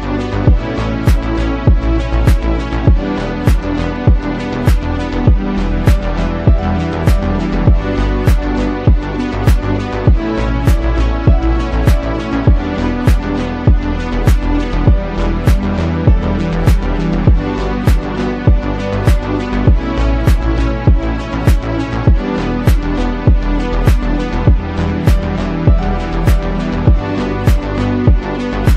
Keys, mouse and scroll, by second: 0.2 click, 1.3 n, 1.5 KP_1, 1.6 KP_1, 2.2 click, 2.6 ctrl+r, 3.0 g, 3.3 2, 3.4 click, 3.4 2, 3.5 Delete, 3.6 click, 3.7 Delete, 3.8 click, 4.3 alt+click, 4.6 shift+click, 4.8 click, 4.8 shift+f, 5.0 shift+click, 5.6 click, 5.9 g, 6.9 click, 7.6 g, 8.0 click, 8.0 x, 8.1 g, 8.2 click, 8.7 ctrl+b, 8.9 2, 10.0 Tab, 10.1 click, 10.3 Tab, 10.3-11.6 typing, 10.9 click, 11.2 click, 11.6 click, 12.4 click, 13.5 click, 13.9 click, 14.0 click, 14.3 click, 14.3 s, 15.0 click, 15.3 click, 16.0 ctrl+z, 16.0 s, 16.5 1, 16.8 ctrl+r, 17.2 ctrl+r, 17.3 click, 18.3 click, 18.6 click, 19.2 click, 19.7 click, 19.7-20.2 g, 20.2 click, 20.9 click, 21.5-27.2 typing, 21.9 click, 22.3 click, 23.1 Tab, 23.2 click, 23.3 click, 23.5 Tab, 23.9 click, 24.4 click, 24.6 Delete, 24.6 click, 25.3 click, 25.4 Tab, 26.2 click, 28.3-28.7 typing.